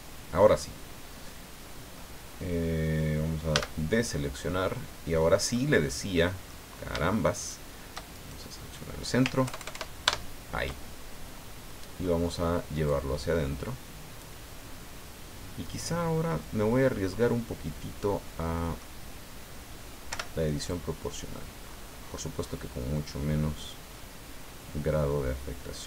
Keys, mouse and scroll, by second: 3.5 a, 4.0 scroll down 2, 4.5-5.7 middle drag, 5.9 scroll up 1, 6.1 middle click, 7.3 shift+right click, 8.1 shift+right click, 9.4 ctrl+KP_Add, 11.3-11.6 scroll down 2, 11.7 middle click, 12.9-14.4 drag, 15.6-19.0 middle drag, 20.1 o, 20.7 click, 21.7-22.8 scroll up 3, 23.9 scroll up 1.